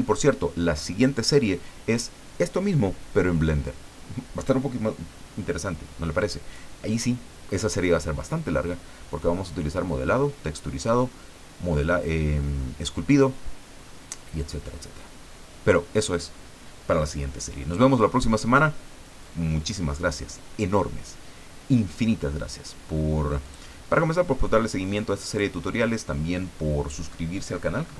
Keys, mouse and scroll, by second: 23.4 click, 25.3 click.